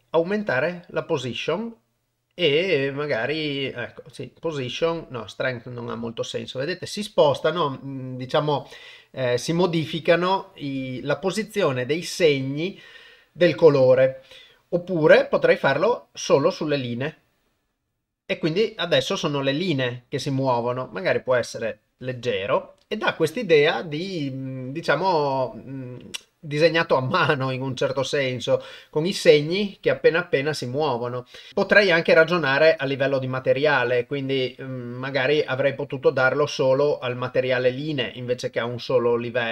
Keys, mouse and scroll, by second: 4.6-5.5 drag, 15.7-17.2 drag, 21.0 click, 25.5-27.9 drag, 33.4 click, 35.2-36.4 drag, 37.5-38.1 drag.